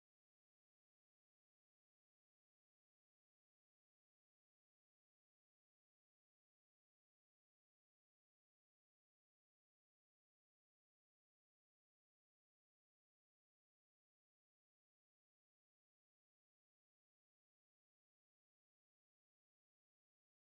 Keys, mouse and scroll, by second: 1.8 click, 2.6 shift+click, 3.8 click, 4.6 e, 6.7 Tab, 7.0-7.8 middle drag, 7.8 click, 8.2-8.6 scroll down 2, 8.6 click, 9.7 click, 10.2-10.7 scroll down 7, 10.8 c, 11.1 v, 11.3 g, 13.7 click, 14.1-17.2 middle drag, 18.0 scroll up 1, 18.1-18.6 middle drag, 18.6 scroll down 3, 18.8-20.5 middle drag.